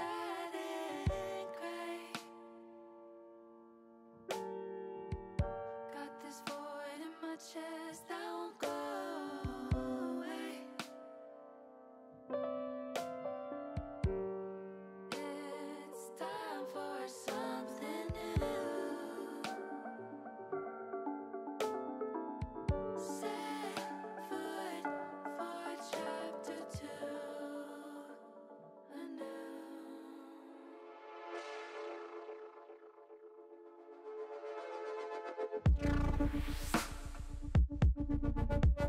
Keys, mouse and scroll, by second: 2.1 shift+click, 2.7 middle click, 4.1 middle click, 4.9 middle click, 5.5 shift+middle click, 6.3 middle click, 7.7 shift+middle click, 9.4 shift+click, 10.4 shift+click, 11.2 ctrl+z, 11.9 click, 12.5 ctrl+z, 12.9-14.0 middle drag, 14.9 shift+middle click, 18.7 ctrl+z, 19.4 click, 19.9 middle click, 20.7 middle click, 21.7 shift+middle click, 23.6 s, 28.6 click, 31.1 middle click, 32.2 ctrl+r, 35.4 click.